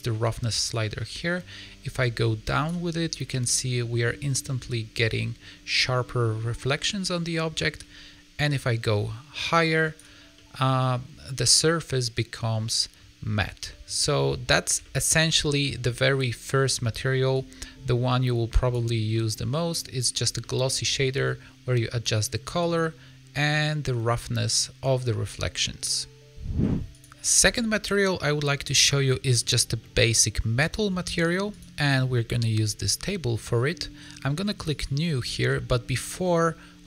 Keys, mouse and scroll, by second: 0.6 click, 3.0 middle click, 6.8 middle click, 8.4 click, 10.3 middle click, 11.5 middle click, 13.3 scroll down 3, 13.6 middle click, 14.7 shift+middle click, 17.3 click, 19.0 middle click, 20.1 scroll down 4, 20.3 middle click, 21.0-22.2 scroll up 4, 22.5 click, 26.9 click, 27.9 middle click, 29.5 middle click, 29.7 shift+middle click, 31.4 scroll up 1, 33.9 middle click, 34.6 click, 36.1 middle click.